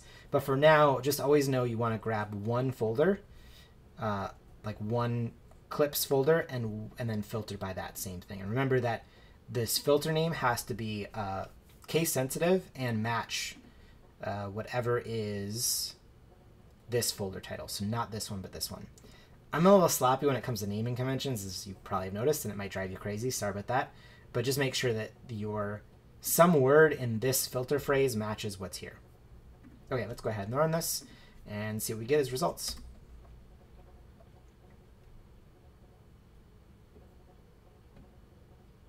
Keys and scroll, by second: 32.7 shift+Return.